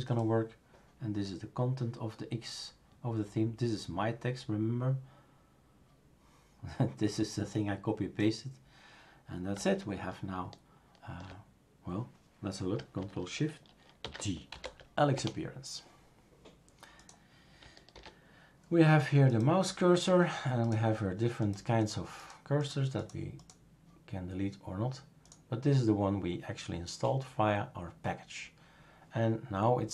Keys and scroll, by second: 14.0 shift+super+d, 14.2-15.1 typing, 17.9 super+f.